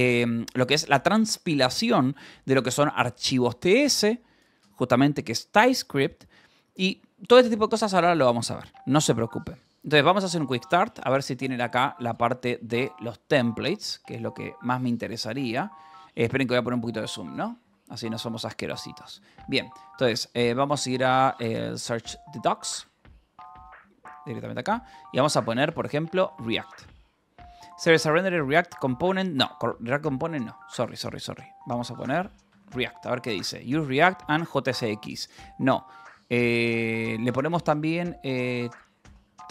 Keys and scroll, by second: 14.1 j, 15.7 k, 16.7 ctrl+=, 19.2 f, 19.8 Escape, 22.9 /, 23.4 Escape, 25.7 r, 26.2 t, 26.4 Return, 29.5 f, 30.4 Escape, 32.1 r, 32.5 t, 33.2 Down, 36.2 Down, 37.9-39.5 typing.